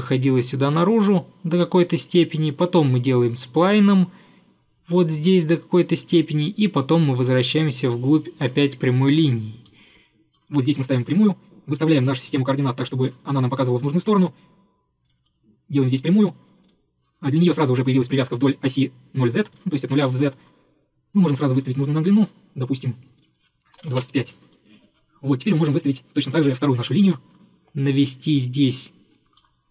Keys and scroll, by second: 16.2 Escape, 16.3 Escape, 23.6-24.4 typing, 26.3 Escape.